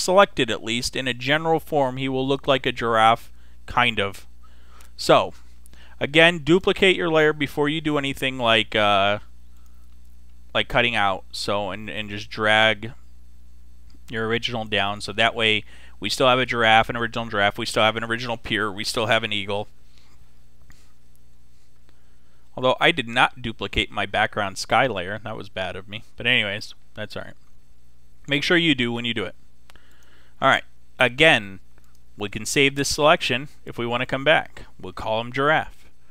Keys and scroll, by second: 35.9 g.